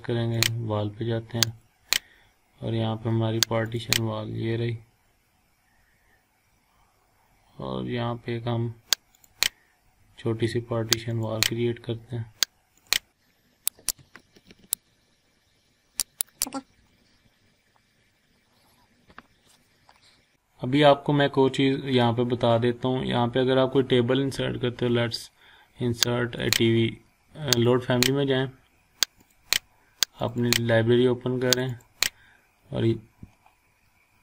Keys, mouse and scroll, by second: 0.3 click, 2.9-3.6 scroll up 1, 3.6 click, 9.1 click, 13.3 scroll up 1, 13.6 click, 14.9-16.1 drag, 16.4 scroll down 1, 17.3 scroll up 1, 17.5 scroll down 1, 17.7 scroll up 1, 18.1 scroll down 1, 18.3-18.6 scroll up 1, 18.6 scroll down 1, 20.4 scroll up 1, 27.7 click, 32.7-33.6 scroll down 1.